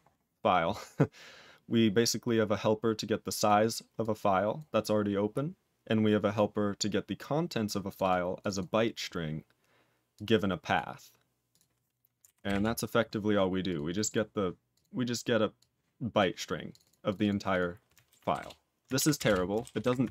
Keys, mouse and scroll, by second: 2.2 click, 3.4 click, 4.0 click, 4.5 click, 6.3 click, 7.1 click, 7.8 click, 7.9 double click, 8.3 click, 8.5 double click, 10.1 click, 10.7 click, 11.4 click, 12.5 Return, 13.6 click, 13.9 click, 14.0 double click, 14.7 click, 15.6 click, 16.1 click, 16.7 click, 16.8 double click, 17.0 click, 17.1 double click, 17.5 click, 18.3 Return, 19.2 Return.